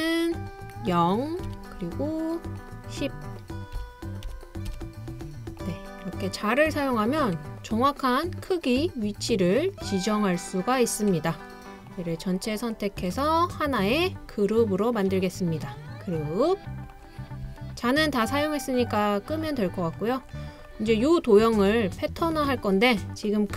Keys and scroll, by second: 1.5 typing, 3.8-4.7 typing.